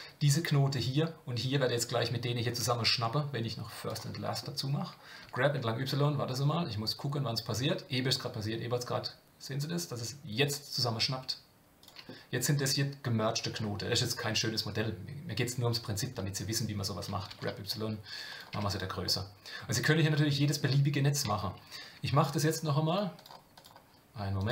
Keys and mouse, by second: 3.9 click, 5.2 g, 18.5 Tab, 19.0-20.6 middle drag, 23.0-24.5 drag.